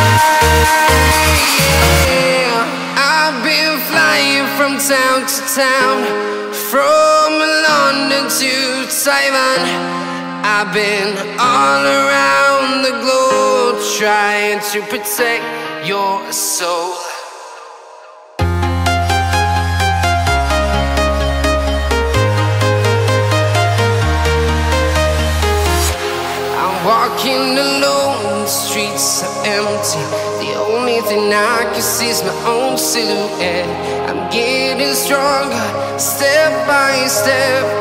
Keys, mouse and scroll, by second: 0.1 scroll up 1, 0.4 right click, 1.3 ctrl+alt+r, 3.1 click, 3.3 scroll down 1, 3.6 scroll up 1, 3.6-4.8 right drag, 6.2 p, 6.7 Return, 8.6-10.0 typing, 10.2 Return, 10.5-10.9 scroll down 1, 11.5 right click, 11.8-13.6 drag, 14.3-15.2 scroll down 1, 15.5 scroll up 1, 19.3 click, 19.5 right click, 21.1 click, 21.8 right click, 22.9 click, 23.1 scroll down 1, 23.4 right click, 24.2 click, 24.8 right click, 25.7-26.9 drag, 27.9 right click, 28.7 click, 29.9 right click, 30.7 click, 30.9 right click, 31.5-31.9 scroll up 1, 32.4 scroll down 1, 32.5 right click, 34.7-35.2 scroll down 1, 35.3-36.8 right drag, 36.8 click.